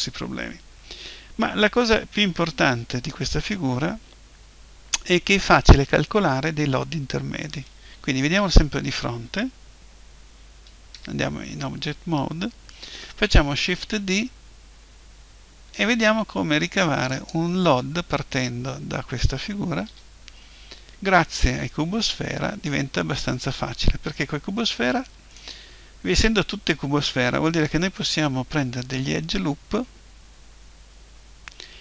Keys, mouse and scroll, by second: 7.4-10.4 middle drag, 8.2 KP_1, 10.9 Tab, 13.5 shift+d, 17.3-19.3 drag, 19.9 Tab, 25.0-28.1 middle drag.